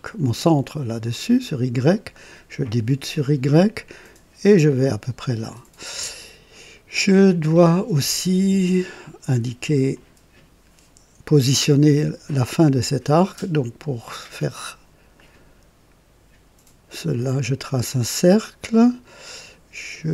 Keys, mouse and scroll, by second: 0.4 click, 2.6 click, 4.4 click, 5.5 right click, 9.9 click, 15.1 click, 17.1 click, 17.7 right click, 18.6 right click.